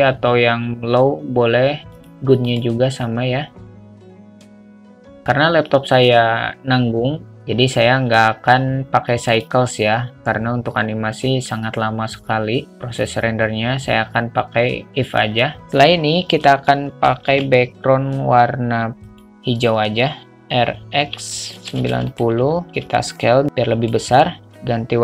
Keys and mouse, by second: 2.2 click, 9.6-15.5 drag, 23.6 click, 24.8 click.